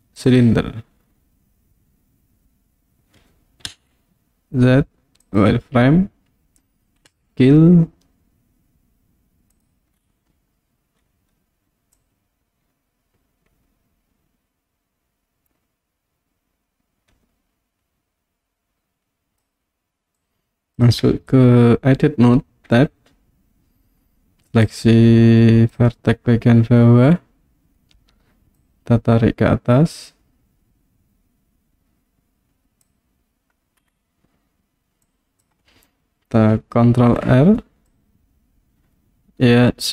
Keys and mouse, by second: 3.7 z, 7.1 s, 9.5 click, 12.0-19.4 drag, 20.3 click, 22.7 Tab, 24.7-25.7 drag, 28.6-32.9 drag, 35.2 click, 37.0 ctrl+r.